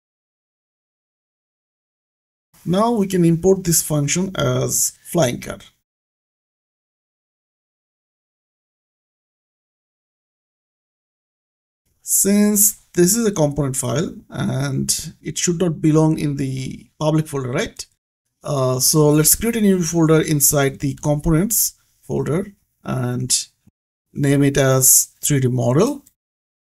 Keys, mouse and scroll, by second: 0.1 y, 1.0 g, 2.0 shift+c, 2.5 click, 2.7 Escape, 3.5 click, 11.2 click, 12.3-12.6 scroll up 1, 14.5 click, 16.8 click, 20.3 click, 22.5 right click, 23.5 click, 24.5 KP_3, 25.9 shift+m.